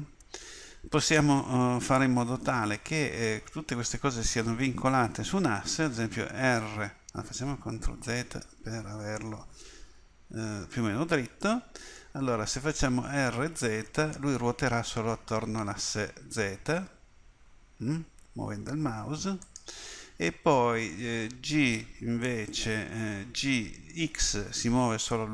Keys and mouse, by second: 6.5 r, 8.0 ctrl+z, 8.6 ctrl+z, 10.0 KP_1, 13.1 r, 22.1 KP_1, 23.1 g.